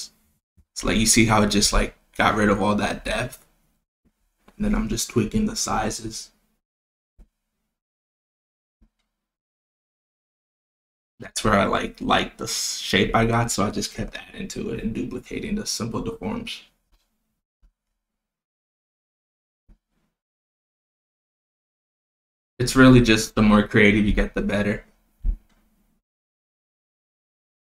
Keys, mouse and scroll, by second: 0.1 click, 0.6-2.5 drag, 4.3 click, 5.7 click, 7.9 click, 10.9 click, 14.6 click, 15.8-16.5 drag, 18.1-19.0 drag, 20.1-21.0 drag, 22.5-23.3 drag, 25.3 click, 26.0-27.2 drag.